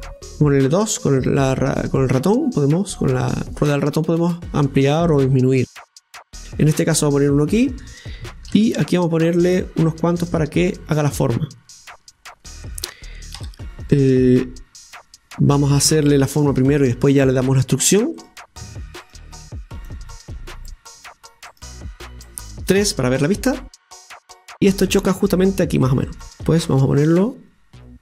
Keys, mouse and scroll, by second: 8.5 ctrl+r, 10.8-13.4 middle drag, 13.4 a, 16.5 scroll up 2, 17.2 scroll up 1, 17.3-19.8 right drag, 19.9 click, 21.8 click, 22.8 KP_3, 24.4 scroll down 1, 26.2-28.0 drag, 26.2 scroll down 1.